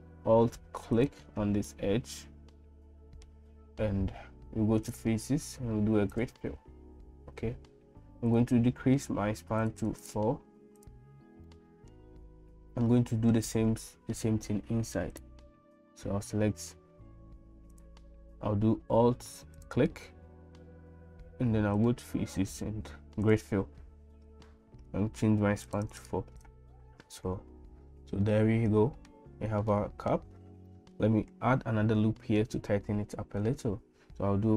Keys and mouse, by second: 1.0 alt+click, 1.7-3.3 middle drag, 4.9-6.3 drag, 9.8 click, 10.1 click, 11.6 middle click, 12.9 middle click, 17.7 click, 21.8-23.4 drag, 26.0 click, 26.5 click, 28.3 middle click, 29.7 middle click, 30.8 middle click, 33.4 ctrl+r.